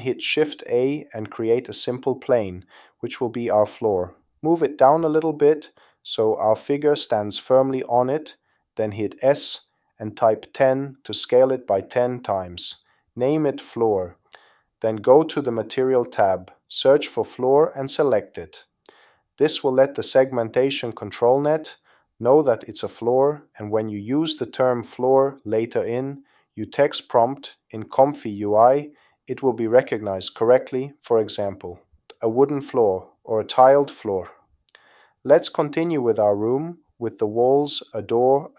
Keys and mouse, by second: 0.2 o, 3.6 shift+a, 6.1-7.4 drag, 10.2 s, 16.4-19.6 drag, 18.6 o, 26.9 click, 35.3 shift+a, 35.6 r, 36.5 click, 36.8 shift+click, 37.1 l, 37.2 click, 37.3 l, 37.8 shift+d, 37.9 click, 38.0 click, 38.2 click, 38.5 click.